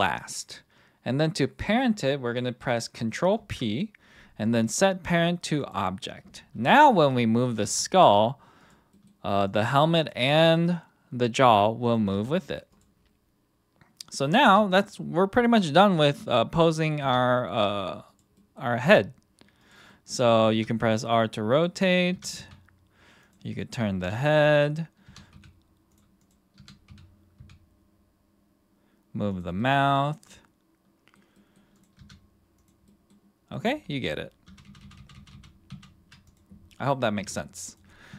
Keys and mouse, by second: 3.3 ctrl+p, 6.7 click, 7.6 g, 8.6-8.9 drag, 8.9 middle click, 9.4 click, 10.0 click, 10.4 middle drag, 11.8 click, 12.1 g, 14.4 KP_1, 15.4 click, 17.0 r, 18.0 click, 18.3 middle click, 18.8 r, 19.6 drag, 19.9 middle drag, 20.5 r, 21.8 middle drag, 22.1 r, 22.4 z, 23.5 middle click, 24.0 r, 24.3 click, 25.0 r, 25.3 x, 25.9 click, 26.5 r, 26.9 x, 27.4 x, 29.6-30.1 middle drag, 30.2-31.1 middle drag, 31.3 middle click, 32.0 r, 32.6 click, 32.9 middle drag, 33.5 middle click, 34.5 ctrl+z, 34.7 ctrl+z, 34.8 ctrl+z, 35.0 ctrl+z, 35.2 ctrl+z, 35.3 ctrl+z, 35.7 ctrl+z, 37.2 KP_1, 37.6 click.